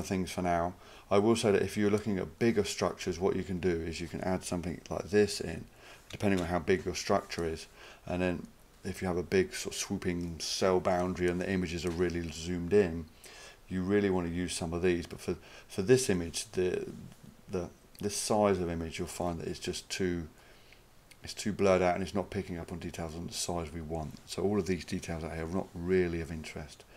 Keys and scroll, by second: 5.1-6.0 typing, 6.4 Return.